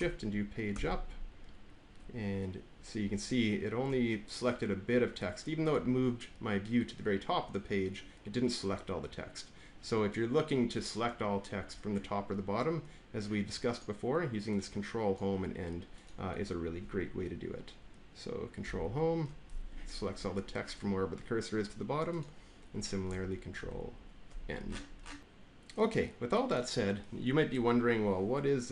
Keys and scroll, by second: 0.6 Page_Up, 18.5 ctrl+shift+Home, 23.5 ctrl+shift+End, 25.2 BackSpace.